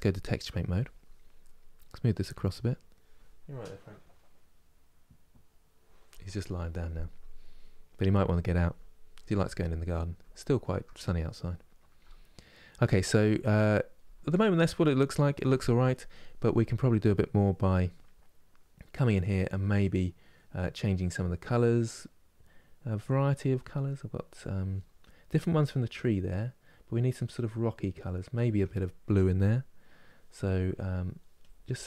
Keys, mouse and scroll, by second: 0.0-7.2 drag, 7.2-16.8 middle drag, 16.8-17.9 drag, 17.9-27.3 middle drag, 27.3-31.8 drag.